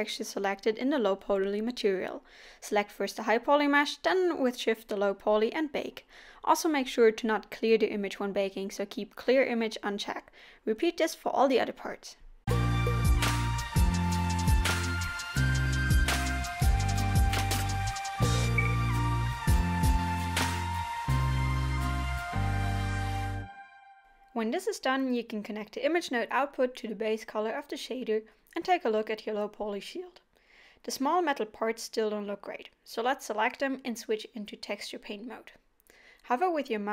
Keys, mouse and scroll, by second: 4.2 scroll up 3, 4.4-4.9 scroll down 2, 5.6 click, 7.6 scroll down 1, 8.2 click, 8.6-9.2 scroll down 2, 9.0 scroll up 1, 11.6 click, 11.8 scroll down 1, 11.9 click, 12.1 click, 12.3 click, 14.1 scroll down 1, 16.4 click, 16.8 click, 17.0 click, 17.0 click, 20.4 scroll down 1, 21.4 click, 24.6 scroll up 1, 25.1-25.5 scroll down 2, 26.6 scroll up 1, 28.9 scroll up 1, 30.1 scroll up 1, 30.2 scroll down 1, 30.8-31.1 scroll down 2.